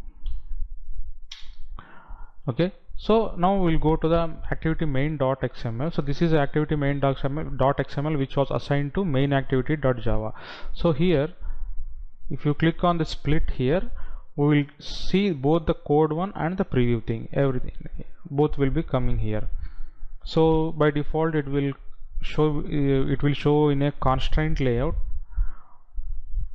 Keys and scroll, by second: 1.2 Delete.